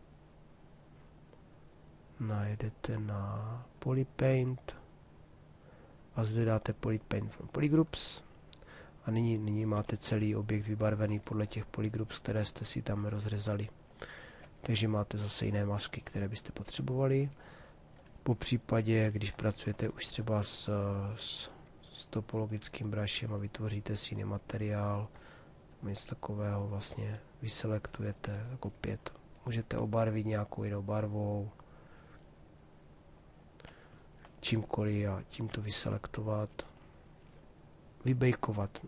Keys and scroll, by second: 9.3 shift+f.